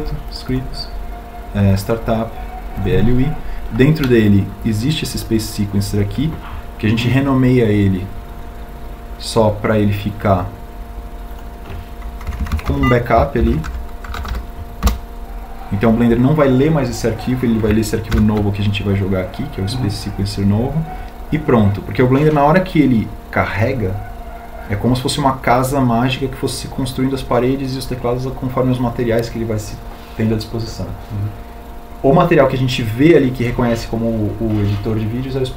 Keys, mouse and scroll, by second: 18.7 ctrl+v.